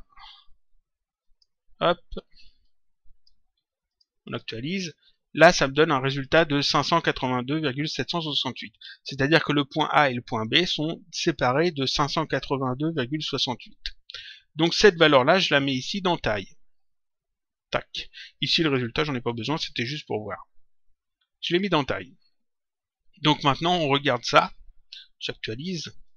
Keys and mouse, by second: 2.6 click, 3.8 click, 5.7 click, 9.1 click, 12.2 click, 16.3 click, 18.5 click, 19.1 Delete, 20.1 click, 23.4 click, 26.0 click.